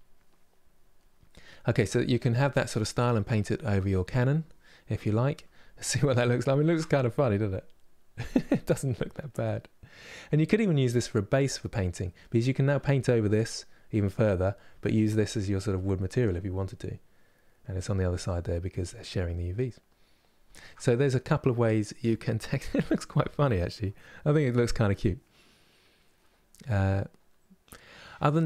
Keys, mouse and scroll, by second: 0.0 click, 0.7-5.1 middle drag, 5.1 KP_Divide, 5.5-28.4 middle drag.